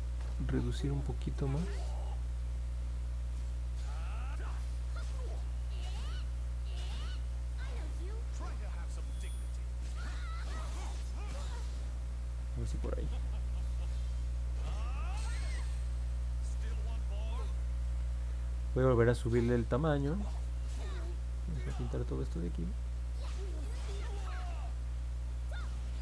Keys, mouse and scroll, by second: 2.6 click, 3.2 click, 4.3 click, 4.7 click, 5.1 click, 5.5 click, 5.9 click, 6.2 click, 6.6 click, 7.0 click, 7.3 click, 7.8 click, 8.2 click, 8.5 click, 8.9 click, 9.3 click, 9.7 click, 10.1 click, 10.4 click, 10.7 click, 11.1 click, 11.4-12.5 drag, 13.3 middle click, 13.7 middle click, 14.3 middle click, 14.7-17.4 alt+drag, 21.0-22.5 drag, 22.8 click, 23.1 click, 23.4 click, 23.6 click, 24.0 click, 24.2 click, 24.5 click, 25.0 click, 25.3 click, 25.6 click.